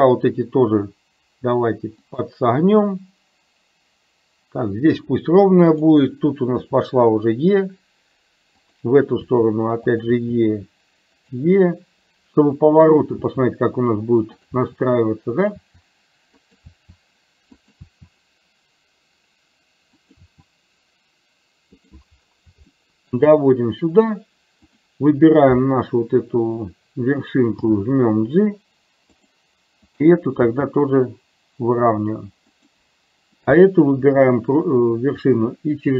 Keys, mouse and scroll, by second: 5.7 click, 6.7 e, 9.3 e, 13.2 e, 14.7 e, 16.7 e, 17.8 e, 20.2 e, 23.0 shift+middle click, 24.7 click, 27.7 g, 30.5 g.